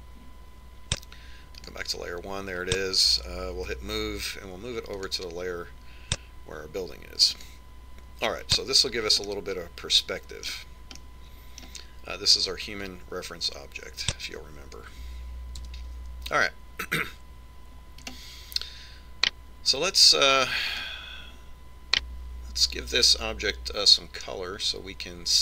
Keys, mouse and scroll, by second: 0.8-4.4 drag, 4.8 m, 8.5 click, 10.4-12.0 middle drag, 12.2-13.8 middle drag, 14.0 click, 16.8 KP_1, 19.2 right click, 21.9 right click.